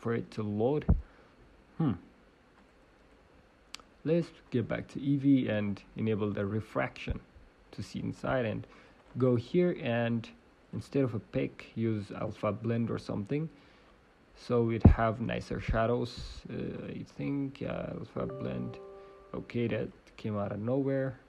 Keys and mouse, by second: 7.1-12.3 middle drag, 12.3-13.8 drag, 13.8 middle click, 14.8 middle click, 15.6 middle click, 17.7-19.9 drag.